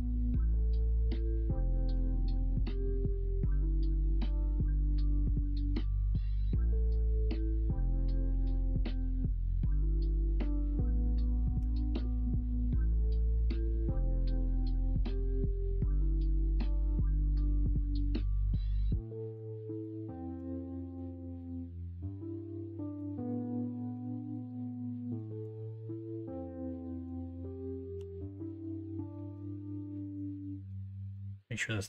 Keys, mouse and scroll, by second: 1.0 middle click, 1.9 e, 3.3-4.5 middle drag, 5.1 middle click, 6.2 e, 9.7 middle click, 10.0 2, 11.5 g, 14.1 middle click, 14.8-15.4 scroll up 1, 18.4 middle click, 20.2 3, 20.8 middle click, 23.6 middle click, 23.9 Tab, 24.4 middle drag, 25.0-25.3 alt+middle drag, 25.3 alt+z, 25.5-27.0 middle drag, 27.9 alt+z, 28.3-29.1 alt+middle drag, 28.4 alt+z, 29.3 alt+z, 30.4 alt+z, 30.4 middle drag, 31.1-31.8 middle drag.